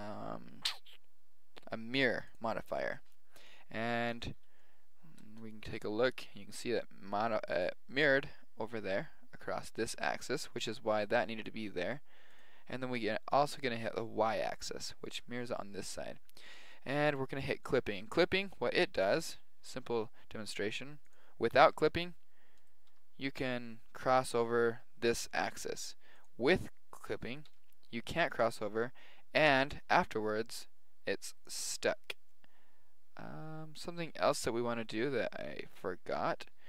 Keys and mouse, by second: 4.6-7.8 middle drag, 12.3-14.1 drag, 17.6-19.4 drag, 18.6 a, 18.8 b, 21.1-22.9 drag, 21.6 g, 22.9 g, 26.2-28.2 drag, 27.4 g, 29.5 g, 32.3 middle click, 33.4 middle click, 34.8 KP_7.